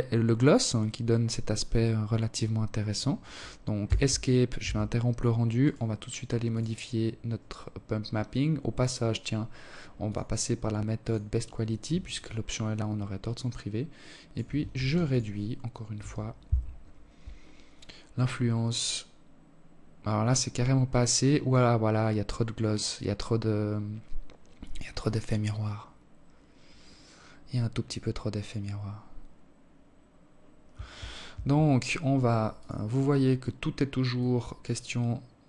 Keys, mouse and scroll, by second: 2.8 Escape, 3.8 right click, 4.2 scroll down 1, 4.8 click, 7.0-8.3 scroll down 3, 8.3 click, 10.4 shift+click, 13.0 ctrl+s, 29.6 Escape, 30.8 click, 32.4 click.